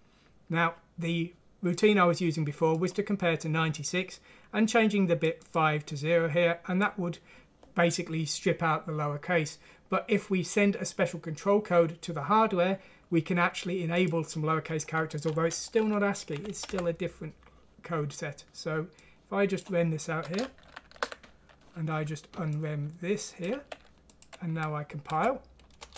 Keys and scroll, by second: 15.8 shift+Home, 16.4 Delete, 16.8 Delete, 20.6 ctrl+q, 23.5 q, 25.0 F6, 25.8 Return.